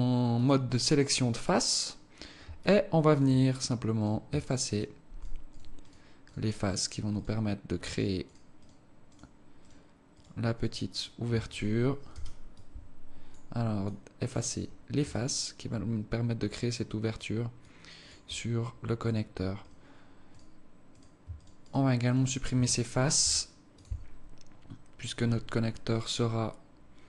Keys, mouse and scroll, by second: 0.3 click, 2.6 alt+click, 3.9 right click, 4.4 shift+right click, 4.8 right click, 5.1 shift+right click, 5.5 right click, 5.9 shift+right click, 6.3 shift+right click, 6.6 shift+right click, 7.1 shift+right click, 7.9 shift+right click, 8.2 shift+right click, 8.7 shift+right click, 9.1 shift+right click, 9.6 shift+right click, 10.2 shift+right click, 10.8 shift+right click, 11.0 shift+right click, 12.1 Delete, 15.1 alt+click, 17.6 alt+click, 19.7 right click, 20.3 right click, 20.9 right click, 21.3 shift+right click, 21.7 right click, 22.1 right click, 22.3 shift+right click, 23.2 Delete.